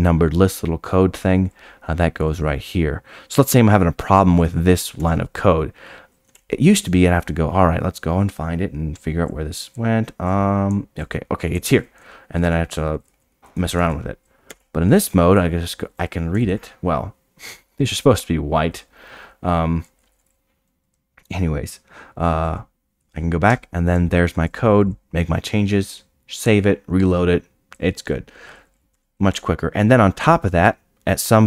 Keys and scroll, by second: 0.1 Tab, 5.7 Tab, 23.0-23.5 scroll down 8, 23.5 Tab, 28.9 Tab, 29.3 Tab, 30.2 o.